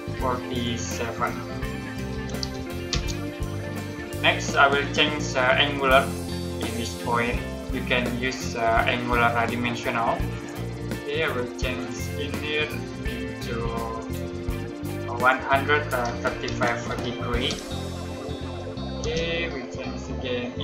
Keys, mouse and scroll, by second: 2.0-2.3 typing, 2.8 Return, 10.2 click, 15.9-17.3 typing, 17.4 Return, 18.9 space, 20.5 click.